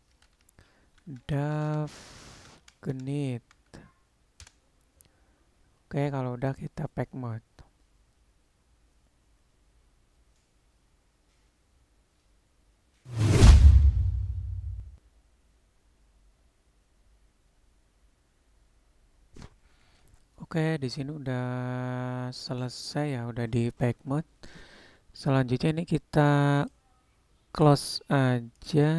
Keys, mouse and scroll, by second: 3.6-5.3 drag, 6.5-18.2 drag.